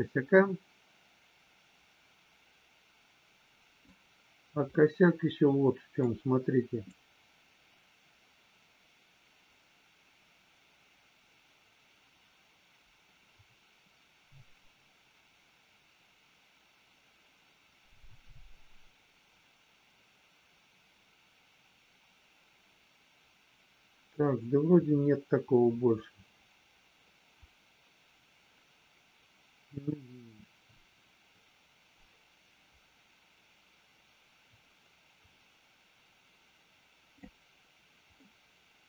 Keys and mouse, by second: 4.7-6.0 middle drag, 6.9-37.1 drag, 38.1-38.8 middle drag.